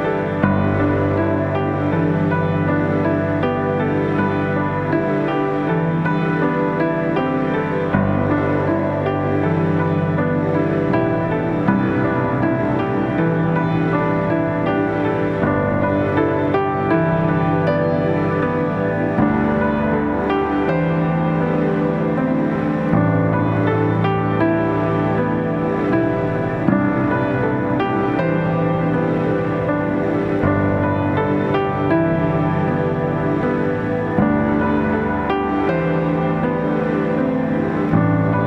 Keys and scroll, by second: 14.7 Delete.